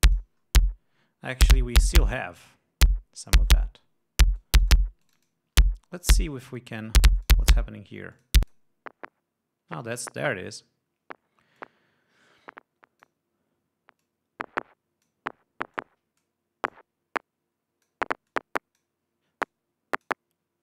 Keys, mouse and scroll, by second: 0.7-1.7 drag, 5.0-6.1 drag, 7.8 click, 8.7 click, 12.2-13.8 drag, 14.6-15.8 drag, 16.3-17.0 drag, 17.3-18.6 drag, 18.9-19.6 drag, 20.0-20.6 drag.